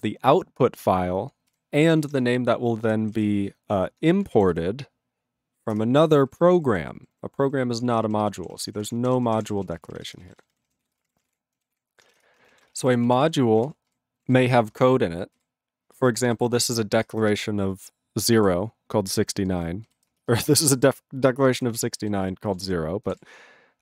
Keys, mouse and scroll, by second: 1.5 ctrl+g, 2.9 ctrl+g, 5.8 ctrl+Return, 6.3 ctrl+=, 7.8 ctrl+space, 7.9 ctrl+e, 7.9 ctrl+n, 8.0 ctrl+e, 8.1 ctrl+n, 8.2 ctrl+g, 8.4 ctrl+p, 8.5 ctrl+p, 8.7 ctrl+o, 8.7-10.0 typing, 10.0 ctrl+k, 10.2 ctrl+space, 10.2 ctrl+e, 10.3 ctrl+g, 10.4 ctrl+n, 10.5 ctrl+n, 10.9 ctrl+s, 11.0 ctrl+space, 11.0 ctrl+a, 11.1 ctrl+p, 11.2 ctrl+g, 11.3 ctrl+e, 11.7 ctrl+s, 12.2 Return, 12.6 ctrl+a, 12.6 ctrl+space, 12.7 ctrl+e, 12.8 ctrl+n, 12.9 ctrl+e, 13.1 ctrl+e, 13.1 ctrl+p, 13.3 ctrl+e, 13.6 ctrl+p, 13.7 ctrl+e, 13.9 ctrl+g, 14.2 ctrl+n, 14.2 ctrl+a, 14.3 ctrl+n, 14.7 ctrl+space, 14.8 ctrl+e, 15.4 ctrl+g, 16.0 ctrl+space, 16.4 ctrl+alt+b, 16.5 ctrl+alt+b, 17.0 ctrl+alt+f, 17.1 ctrl+alt+f, 17.3 ctrl+alt+b, 18.4 ctrl+g, 19.5 ctrl+space, 19.5 ctrl+e, 19.9 ctrl+g, 20.1 ctrl+space, 20.5 ctrl+alt+b, 20.6 ctrl+alt+b, 21.6 ctrl+alt+f, 21.7 ctrl+alt+f, 22.0 ctrl+alt+b, 22.2 ctrl+alt+b, 22.7 ctrl+g, 23.1 ctrl+space, 23.1 ctrl+e.